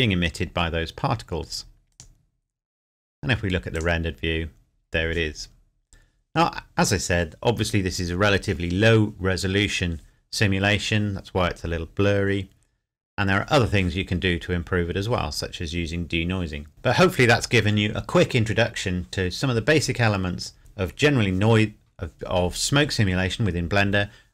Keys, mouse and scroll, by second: 1.9 click.